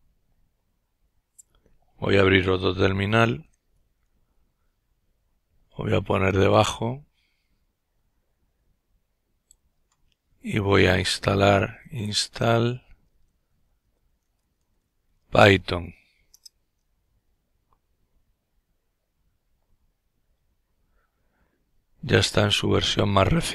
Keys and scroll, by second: 2.5 ctrl+alt+t, 10.0-14.0 typing, 15.2 Return, 17.0 typing.